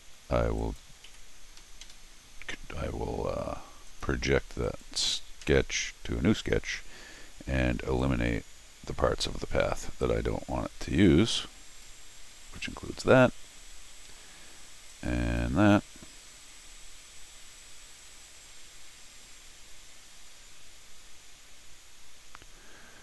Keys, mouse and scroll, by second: 0.6 click, 1.1 c, 1.6 Escape, 1.8 Escape, 3.9 click, 4.6 click, 5.4 g, 6.1 scroll down 1, 6.4-7.3 scroll up 3, 7.9 t, 8.0-9.2 drag, 9.4 scroll down 1, 10.0-11.8 drag, 12.6-14.1 middle drag, 14.9 click.